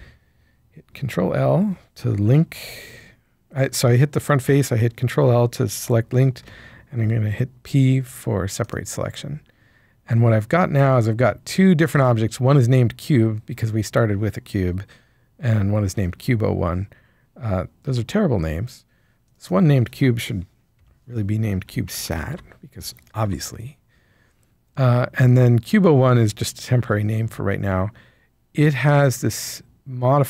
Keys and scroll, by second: 6.4 p, 17.8 Tab, 20.7 Right, 21.9-22.3 typing, 23.2 Return.